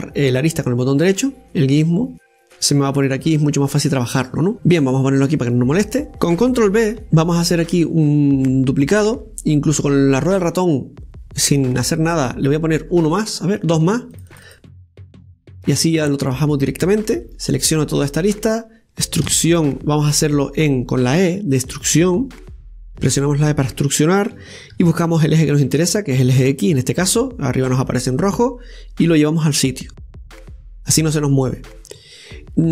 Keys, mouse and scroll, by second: 1.4 right click, 4.5 scroll down 1, 5.6 click, 7.0 ctrl+b, 15.2 click, 15.4 click, 18.1 right click, 18.5 shift+right click, 19.0 shift+right click, 20.1 e.